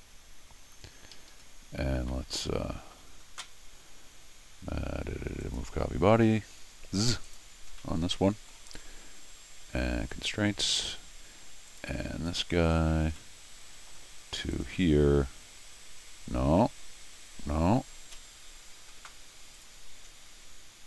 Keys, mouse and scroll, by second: 1.1 Escape, 2.1 middle click, 5.4 click, 7.2 click, 7.7 scroll down 1, 7.8 middle click, 8.9 scroll up 2, 10.1 click, 10.9 scroll up 2, 11.7 click, 12.7 scroll down 1, 13.2 middle click, 14.5 click, 19.5 click.